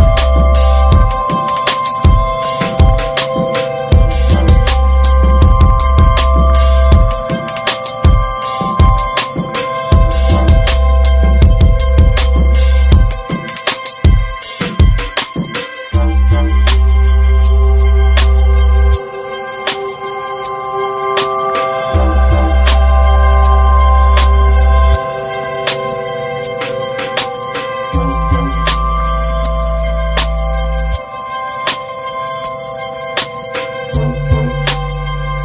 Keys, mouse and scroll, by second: 0.7 shift+middle click, 0.9-1.2 shift+scroll up 1, 1.2-1.7 middle drag, 1.9 alt+middle click, 2.8 r, 7.6 scroll down 1, 7.8 middle drag, 8.1 scroll up 1, 8.3 ctrl+s, 8.6 Tab, 9.2-10.0 scroll up 1, 10.0 Tab, 11.3-12.9 drag, 12.9-13.7 middle drag, 14.1-14.8 shift+middle drag, 14.8 r, 18.5 ctrl+z, 20.0 r, 21.7-22.1 middle drag, 22.1 ctrl+s, 22.4-23.7 middle drag, 23.7-25.4 drag, 25.4 ctrl+z, 26.7-30.1 drag, 30.4-31.1 middle drag, 31.1 scroll down 1, 31.4-32.6 middle drag, 32.6-33.7 drag, 34.2 click, 34.4 scroll down 2, 34.5 middle drag, 34.8 ctrl+s, 35.0 click, 35.2 /.